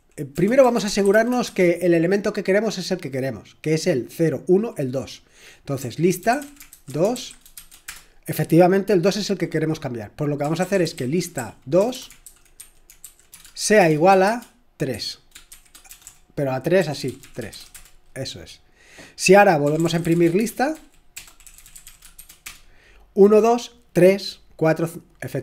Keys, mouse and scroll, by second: 0.0-2.0 typing, 5.9-7.9 typing, 10.4-17.7 typing, 19.6-22.4 typing, 25.3 typing.